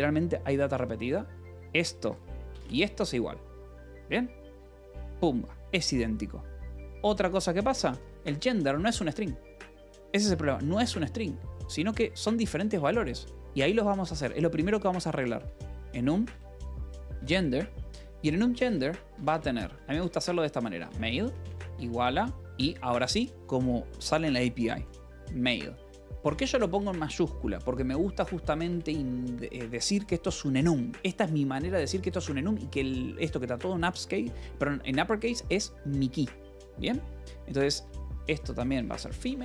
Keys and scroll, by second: 2.0 j, 2.6 j, 6.5 Escape, 7.7-9.1 typing, 12.8-17.5 typing, 18.6 Return, 19.2-22.6 typing, 24.6-26.4 typing, 26.7 Return, 28.6 space, 38.5-39.4 typing.